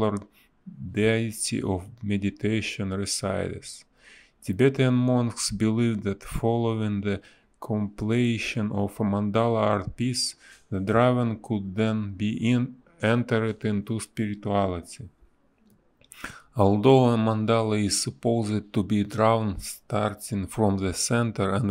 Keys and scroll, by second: 4.4 space, 6.8 ctrl+z, 7.1 ctrl+z, 7.2 space, 11.7 ctrl+z, 16.0 ctrl+z, 16.7 space, 18.8 space, 19.9 ctrl+z, 21.1 space.